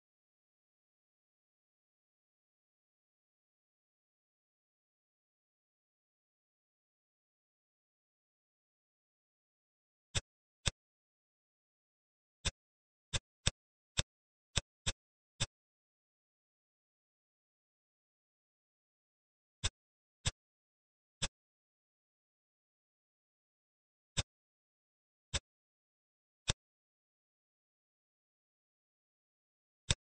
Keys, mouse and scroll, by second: 10.1 click, 10.6 click, 11.5 click, 12.4 click, 13.5 shift+click, 14.0 shift+click, 14.5 shift+click, 14.8 shift+click, 15.2 z, 16.6 e, 20.2 click, 20.7 Tab, 21.1 click, 22.3 shift+d, 24.4 middle click, 25.2 click, 26.4-27.4 middle drag, 27.4 s.